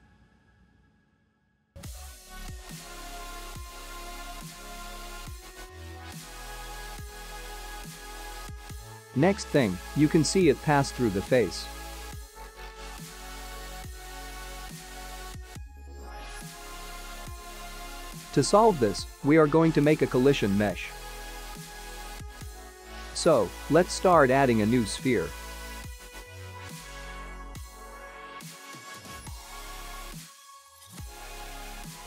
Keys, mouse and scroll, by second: 24.6 middle click, 28.9 click, 29.4 h, 30.7 click.